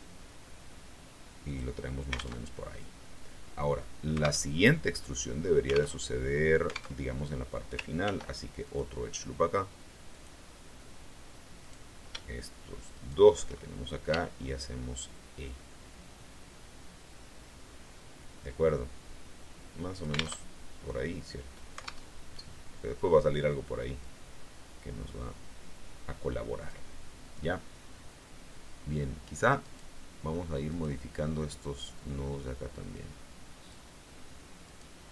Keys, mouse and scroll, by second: 1.4 click, 2.3 alt+Tab, 4.4 alt+Tab, 5.8 alt+Tab, 6.9 alt+Tab, 7.9 ctrl+r, 8.5 ctrl+click, 10.0 click, 11.5 right click, 12.8 shift+right click, 14.0 e, 19.8 alt+click, 20.3 alt+Tab, 22.0 alt+Tab, 23.9-26.8 drag, 29.5 right click, 30.6 right click, 31.9-33.8 drag, 34.5 right click.